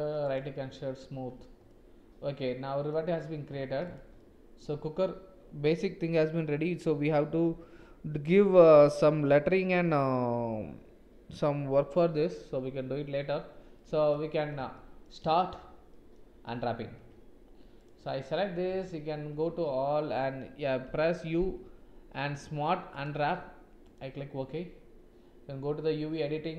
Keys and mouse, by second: 1.6-2.8 middle drag, 3.8 click, 4.1 middle click, 13.7 middle click, 14.7 shift+middle click, 15.8 middle click, 16.4 Tab, 16.9 Tab, 18.6 Tab, 19.4 a, 20.8 u.